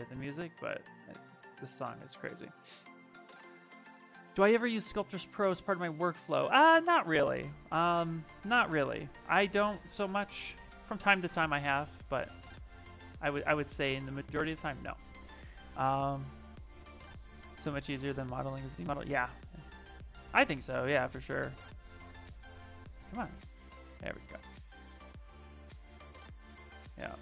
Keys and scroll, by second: 0.0 shift+f, 6.7 s, 9.9 shift+f, 10.3 shift+f, 11.3 shift+d, 11.7 shift+f, 12.4 d, 13.9 shift+f, 20.2 ctrl+z, 21.6 shift+f, 21.9 shift+f, 26.2 s.